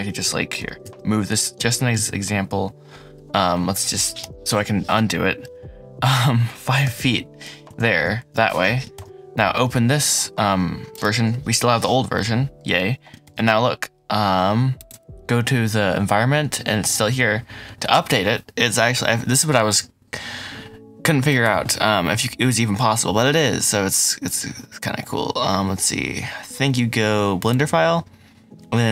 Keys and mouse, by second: 0.5 g, 0.8 shift+z, 4.0 y.